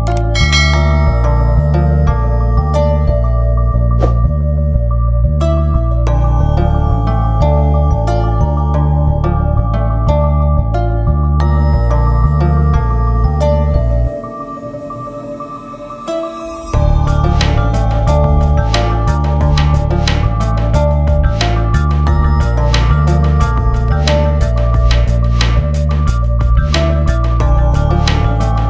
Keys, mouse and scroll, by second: 1.1-1.7 scroll up 1, 1.7 click, 2.9 c, 3.2 shift+click, 3.6-5.9 shift+drag, 6.7 shift+c, 6.9 shift+click, 7.5 F4, 8.1 click, 8.8 click, 9.4 ctrl+s, 9.6-13.5 drag, 13.5 ctrl+z, 13.8-16.8 drag, 16.8 alt+j, 18.7-23.5 drag, 23.5 F8, 24.3-25.7 drag, 25.7 Return, 27.9 ctrl+space.